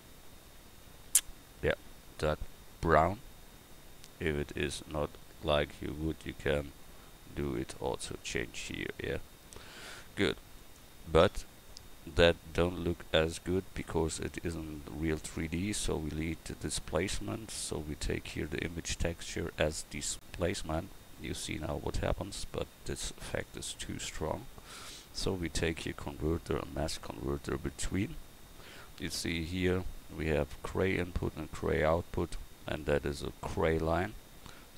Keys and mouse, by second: 23.2-26.9 drag, 32.1-34.7 middle drag.